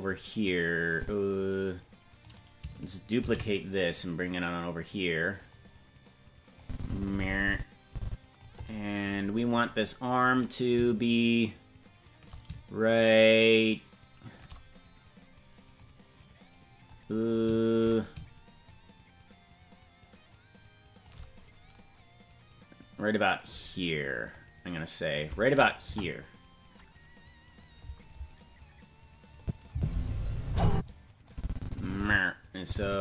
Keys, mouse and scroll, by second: 0.9 click, 2.3 right click, 3.2 shift+d, 6.6-8.4 drag, 9.2-9.8 scroll down 6, 10.1 scroll down 2, 12.9-14.4 shift+drag, 15.7-16.9 drag, 18.6-21.1 shift+drag, 24.3 click, 25.8 KP_0, 29.4 click, 29.7 space, 30.7 space, 31.3-33.0 drag.